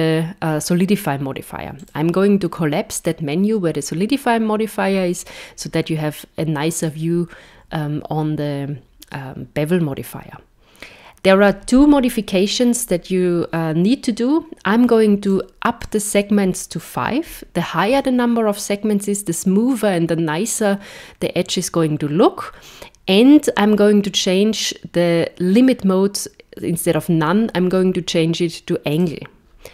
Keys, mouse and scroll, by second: 1.8 click, 15.4 click, 29.0 click.